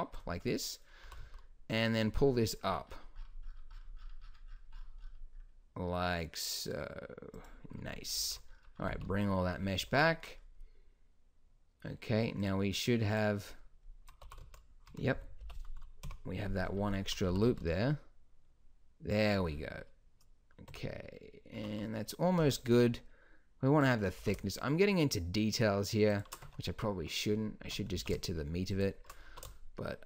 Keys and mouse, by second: 0.5 middle click, 1.0 g, 8.1 alt+h, 8.9 z, 14.2 g, 15.4 o, 16.0 KP_1, 17.3 g, 20.7 Tab, 21.6 Tab, 22.5 b, 24.2 s, 26.4 Tab, 27.6 Tab, 28.0 s, 29.2 s.